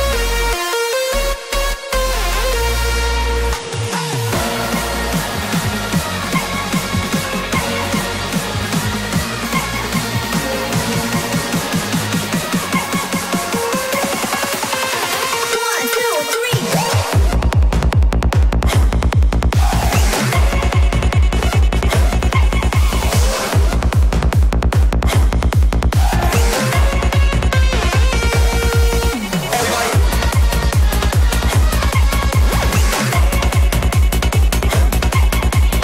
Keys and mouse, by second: 0.1 alt+e, 3.7 shift+click, 4.3-5.7 middle drag, 6.5-8.0 middle drag, 10.0-13.5 middle drag, 14.8-15.8 middle drag, 17.2-21.7 drag, 22.2-23.1 middle drag, 25.1 Tab, 25.5 middle click, 26.8 click, 28.0 3, 28.9-33.2 middle drag, 35.2 middle click.